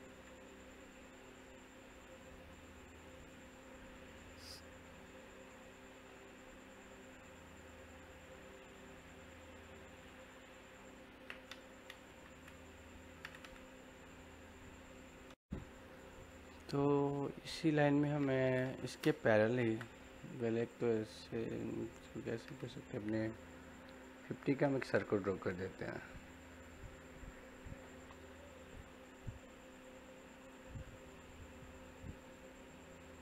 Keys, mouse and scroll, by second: 2.7-5.5 middle drag, 12.1 l, 15.2 Home, 15.8-18.7 middle drag, 19.3 l, 19.6 space, 20.5 click, 22.6 typing, 28.6 click, 28.6 typing.